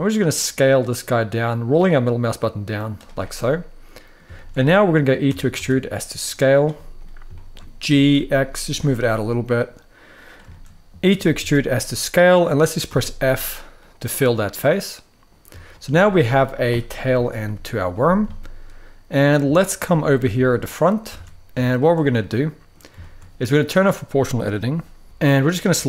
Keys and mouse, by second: 2.7 click, 3.2 middle click, 4.1 shift+middle click, 5.0 e, 5.2 s, 6.5 middle click, 7.0 shift+middle click, 7.5 g, 7.8 x, 10.2 shift+middle click, 10.8 e, 11.1 s, 12.1 click, 12.6 f, 13.5-15.0 middle drag, 15.4 shift+middle drag, 16.8 KP_3, 17.2 KP_1, 18.1-18.8 shift+middle drag, 19.2 shift+middle drag, 20.1 shift+middle click, 20.8 alt+a, 21.3 shift+middle click, 21.9 middle click, 22.7 shift+middle click, 24.2 click.